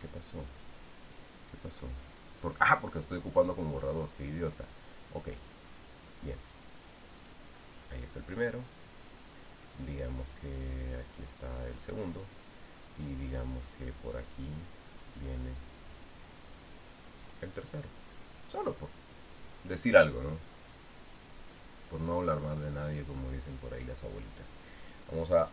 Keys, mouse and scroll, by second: 4.5 click, 8.0 click, 12.4 click, 18.0 click, 21.9 click, 23.6 click.